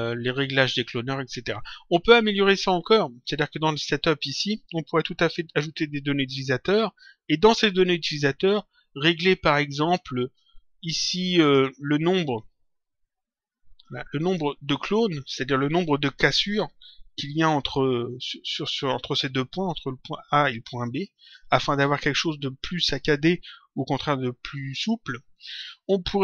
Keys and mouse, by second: 3.4 click, 8.4 click, 11.3 click, 13.7 click.